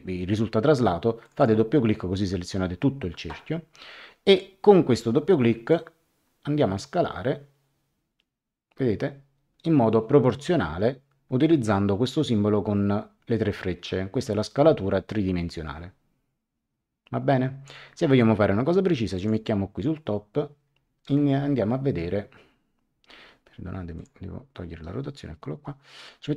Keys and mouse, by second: 1.2 click, 5.7 click, 19.1 click, 23.9 click.